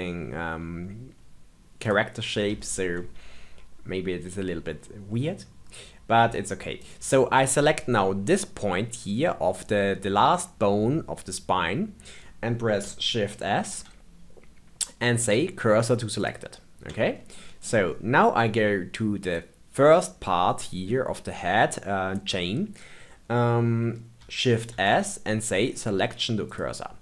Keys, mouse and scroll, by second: 2.6-6.7 shift+middle drag, 6.7 click, 13.6 shift+s, 17.3 middle click, 17.8-19.1 scroll up 4, 19.1 click, 24.7 shift+s.